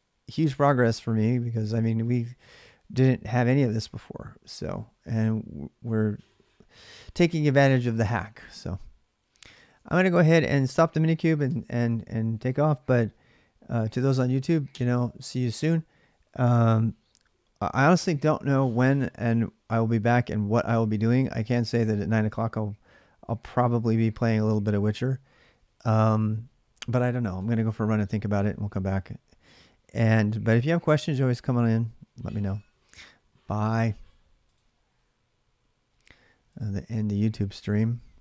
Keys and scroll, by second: 9.5 alt+Tab, 11.2 alt+Tab.